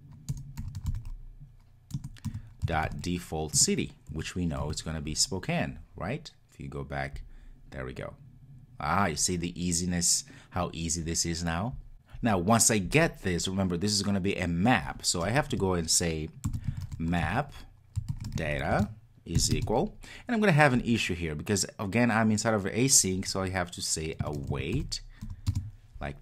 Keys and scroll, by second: 2.0 Return, 3.4 Return.